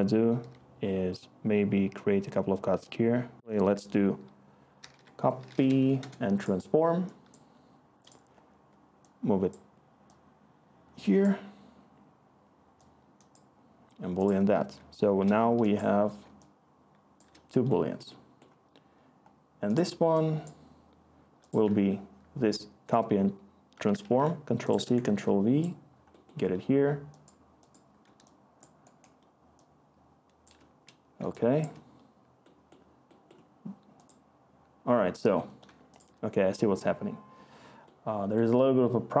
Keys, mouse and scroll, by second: 2.9 Tab, 2.9 typing, 4.5-5.2 typing, 5.8 Down, 5.9 Return, 8.3 typing, 24.0 ctrl+c, 24.8 ctrl+v.